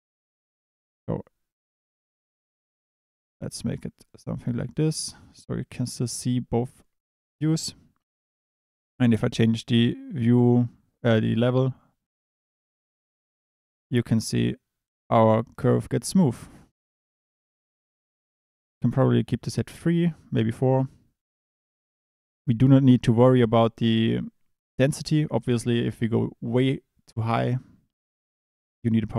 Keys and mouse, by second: 0.0 ctrl+space, 8.3-18.4 drag, 18.7 click, 20.9 click, 21.4 click.